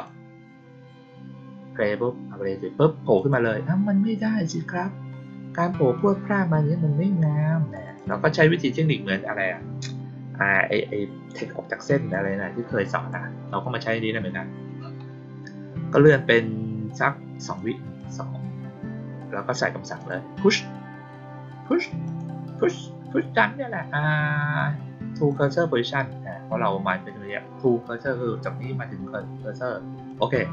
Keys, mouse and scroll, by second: 3.1 click, 7.7 click, 7.9 click, 12.0-13.0 drag, 17.3 click, 17.9 click, 19.9 click, 22.0 click, 25.2 click, 30.0 click.